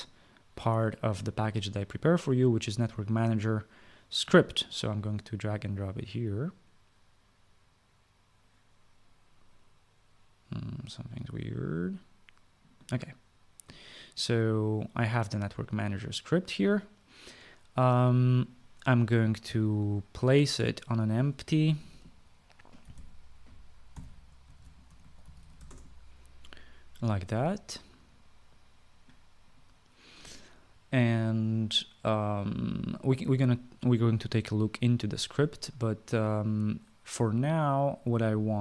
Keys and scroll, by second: 22.3-26.9 typing.